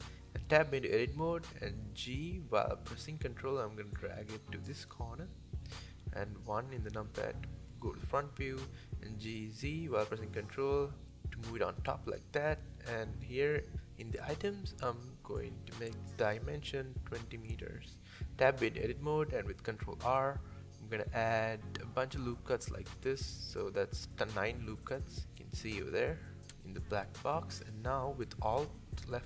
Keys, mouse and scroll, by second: 0.0 Tab, 1.3 g, 2.5 g, 4.0 middle click, 4.5-4.8 scroll down 6, 4.8 shift+middle click, 5.2 KP_1, 5.6-6.3 scroll up 9, 5.8 shift+middle click, 6.8-7.6 scroll down 1, 7.6 g, 9.2 shift+middle click, 9.6 click, 9.9-11.1 middle drag, 11.1 Tab, 12.0 click, 13.4-14.9 drag, 14.9-15.6 scroll down 5, 16.0 KP_1, 16.7 scroll up 2, 17.2 Tab, 17.8 scroll down 1, 18.0 shift+middle click, 18.9 ctrl+r, 23.8-25.4 scroll up 2, 25.4 3, 25.7-27.4 shift+middle drag, 27.4 alt+click, 27.8 alt+click, 28.4 alt+shift+click, 29.0 alt+shift+click.